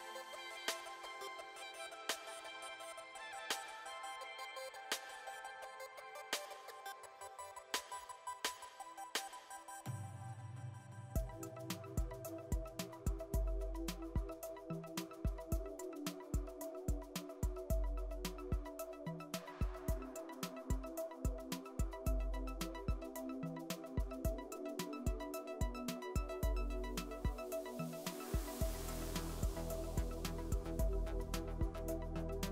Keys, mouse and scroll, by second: 1.1 shift+a, 3.3 g, 5.7 KP_1, 6.5 KP_Enter, 6.8 KP_Enter, 6.9 KP_3, 7.4-9.3 middle drag, 8.9 s, 12.4-13.4 middle drag, 13.5-14.6 middle drag, 16.2 Tab, 16.4 middle click, 17.0-19.1 drag, 18.4 KP_1, 18.7 KP_3, 19.6 KP_1, 20.5 e, 24.3 click, 25.6 s, 27.1 click, 28.5 s, 30.7-31.7 middle drag, 31.5 ctrl+r, 32.3-32.5 middle drag.